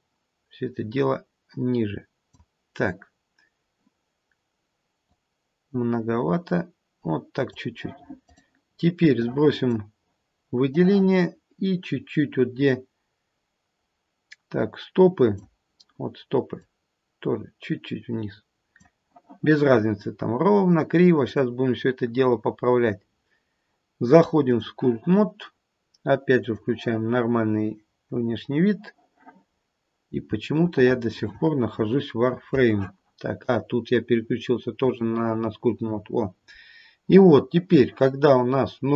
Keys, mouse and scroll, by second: 5.0 click, 9.1 click, 10.7 click, 16.6 click, 21.3 click, 25.2 click, 26.5 click, 29.6-30.2 scroll up 2, 30.2-30.6 scroll up 1, 30.6 shift+middle click, 33.4 click, 36.1-38.9 scroll down 2.